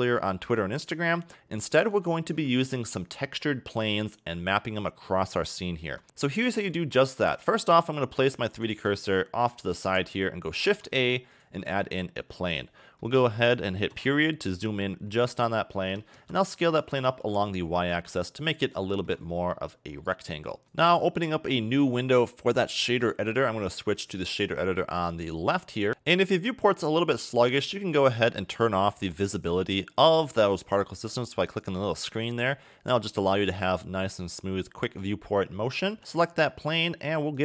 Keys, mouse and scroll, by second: 1.3 middle click, 1.4-2.1 scroll down 4, 2.1 shift+middle click, 3.6 middle click, 4.5 middle click, 5.7 shift+middle click, 8.7 shift+right click, 9.1 middle click, 10.6 shift+a, 12.7 middle click, 14.0 KP_Decimal, 15.0 scroll down 2, 15.2 middle click, 16.0 s, 18.9 shift+middle click, 20.0 middle click, 20.6 click, 21.9 click, 24.0 click, 25.4 click, 25.9 scroll down 5, 26.0 middle click, 27.1 scroll up 1, 27.2-27.8 scroll down 2, 27.8 click, 29.4 click, 31.8 click, 32.2 scroll down 1, 32.5 middle click, 33.6-34.1 scroll up 7, 34.1 scroll down 1, 34.2 middle click, 34.9 scroll up 2, 36.0 click, 37.3 click.